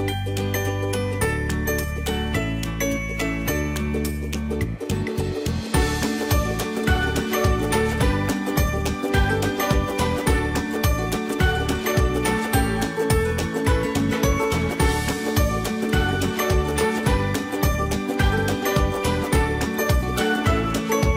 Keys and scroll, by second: 6.2 ctrl+j, 12.6 ctrl+j.